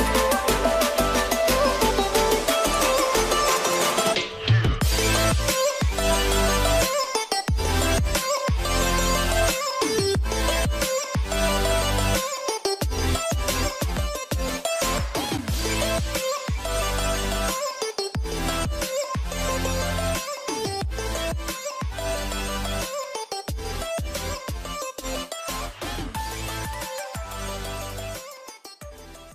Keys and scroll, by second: 14.1 ctrl+0, 15.3 ctrl+d.